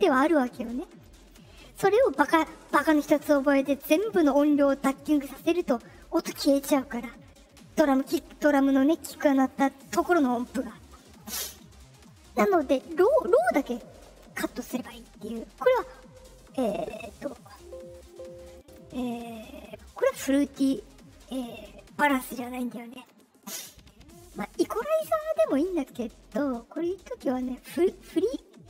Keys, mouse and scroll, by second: 14.4 click, 14.8 middle click, 17.4 click, 17.9 right click, 18.5 right click, 20.5 click.